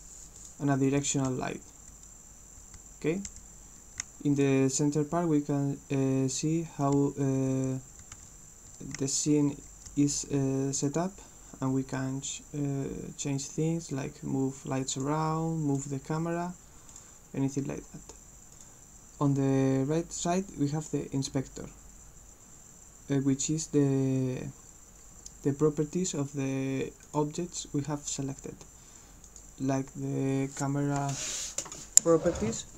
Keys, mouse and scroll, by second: 0.4 click, 1.0-4.4 right drag, 1.1 w, 1.4 d, 2.9 w, 3.3 d, 4.1 s, 6.9-10.9 right drag, 7.1-10.5 typing, 14.0-15.0 drag, 15.8 click, 16.9 click, 18.6 click, 27.1 click, 29.3 click.